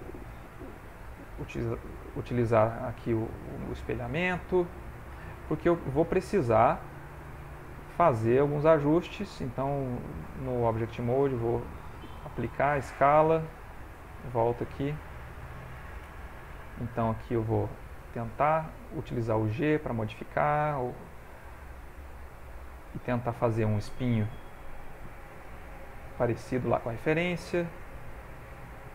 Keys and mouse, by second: 0.5 shift+click, 0.9 shift+click, 2.7 click, 3.6 shift+click, 4.4 middle click, 5.7 click, 6.3 ctrl+middle click, 6.9 f, 7.7 click, 9.6 ctrl+Tab, 11.3 ctrl+Tab, 12.4 ctrl+a, 13.9 ctrl+Tab, 15.3 ctrl+middle click, 17.0 shift+click, 17.6 shift+click, 17.9 shift+click, 18.3 shift+click, 19.0 g, 19.2 click, 20.2 click, 20.6 shift+click, 21.3 click, 21.7 click, 22.8 click, 23.6 click, 24.1 click, 25.7 click, 26.1 click, 26.8 click, 27.0-27.4 shift+click, 27.7 click, 28.1 shift+click, 28.5 shift+click.